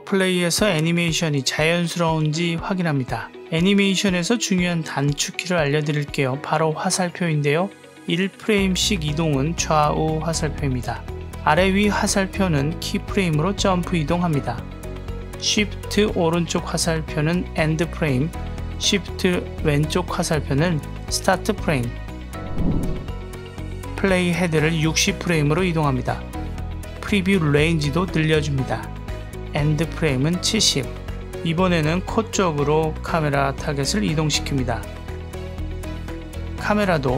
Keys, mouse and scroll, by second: 4.3 space, 7.8-8.6 Left, 8.8 Left, 9.7 Right, 11.3 Up, 12.0 Down, 12.6 Up, 13.2 Down, 13.6 Up, 14.2 Down, 15.2 shift+Right, 18.7 shift+Left, 24.1-25.3 drag, 26.6 shift+middle click, 29.2-31.1 drag, 31.9 click, 33.3 click, 35.1 click, 36.2 click.